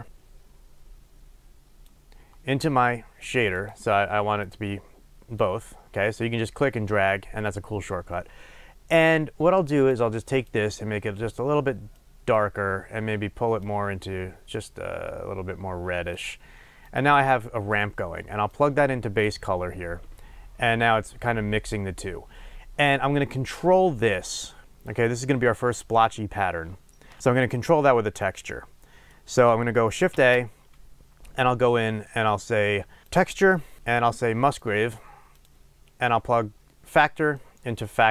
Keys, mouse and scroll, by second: 3.5 click, 4.4 click, 9.7 click, 10.3 drag, 16.9 click, 18.5-27.2 drag, 27.2-35.4 middle drag, 30.1 shift+a, 35.4 click, 37.3-38.1 drag.